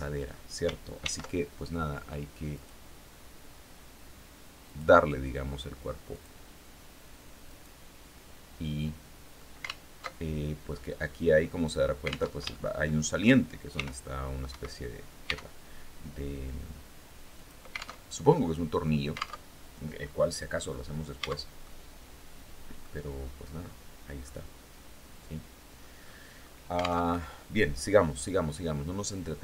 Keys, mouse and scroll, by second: 0.5 ctrl+r, 2.0 click, 4.1 click, 5.6 click, 6.9 right click, 7.6 middle click, 8.5 scroll up 2, 9.3 alt+Tab, 11.8 alt+Tab, 12.0 alt+shift+click, 13.2 r, 13.9 Escape, 14.7 e, 16.8 click, 17.4 alt+Tab, 18.9 alt+Tab, 19.4-19.8 scroll down 2, 20.0 scroll down 2, 20.7 Tab, 21.1-22.5 drag, 23.7-25.4 drag, 25.5-26.1 scroll up 2, 26.5 alt+Tab, 29.1-29.4 drag.